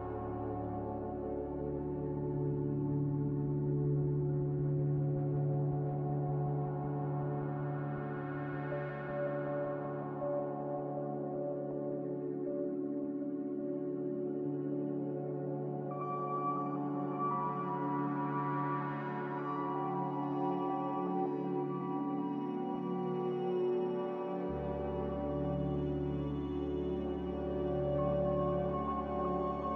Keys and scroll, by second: 7.6 z, 10.7-11.5 typing, 24.0-24.8 typing.